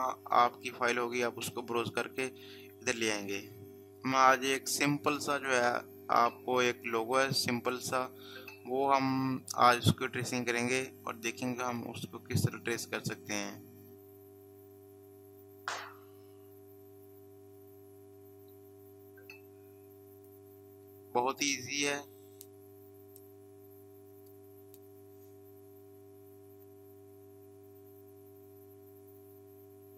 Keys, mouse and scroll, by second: 2.6-3.1 scroll down 1, 7.2-8.1 scroll up 1, 10.2-13.8 scroll up 1, 20.0-21.8 scroll down 1, 23.4-25.4 scroll down 1, 29.2 scroll down 1.